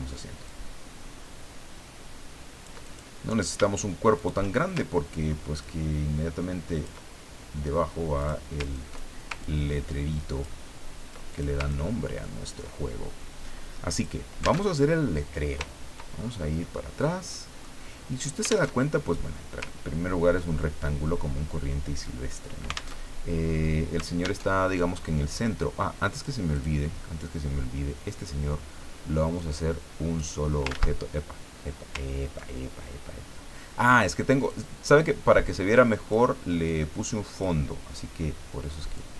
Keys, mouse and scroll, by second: 0.5-3.1 ctrl+drag, 4.1 shift+click, 5.6-7.2 ctrl+drag, 8.2 click, 8.8 ctrl+click, 9.4-10.8 ctrl+drag, 11.3 ctrl+click, 11.7 ctrl+click, 13.9 click, 14.6 alt+Tab, 15.7-16.8 ctrl+scroll down 6, 17.3 click, 18.7 alt+Tab, 19.7-20.2 ctrl+scroll down 2, 22.9 alt+Tab, 24.4 alt+Tab, 26.1 click, 26.5 click, 29.4 click, 30.7 ctrl+z, 34.4-36.3 drag, 36.6-37.9 drag, 38.9-39.1 drag.